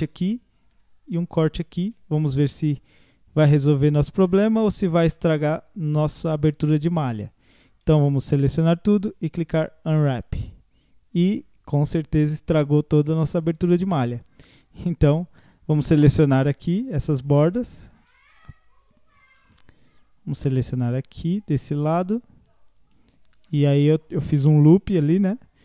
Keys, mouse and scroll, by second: 1.1 alt+shift+click, 2.6 u, 4.7 scroll down 2, 5.1-8.1 middle drag, 8.1 a, 8.9 u, 11.3-14.7 middle drag, 14.7 click, 15.4 alt+shift+click, 15.9 alt+shift+click, 16.7-17.9 middle drag, 17.9 shift+click, 18.9 shift+click, 19.5-21.0 middle drag, 21.0 alt+shift+click, 22.0 shift+click, 22.7 shift+click, 23.1 scroll up 3, 23.5-25.6 middle drag.